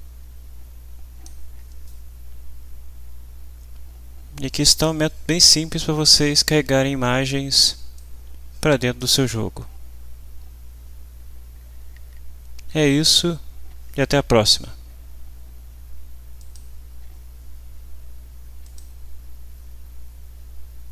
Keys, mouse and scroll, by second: 8.0-9.2 drag, 16.4 click, 18.6 click.